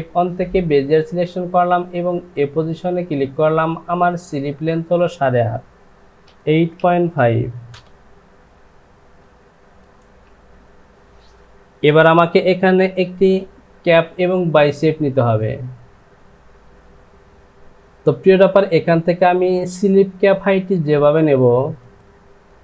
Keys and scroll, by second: 6.4 KP_8, 6.8 KP_8.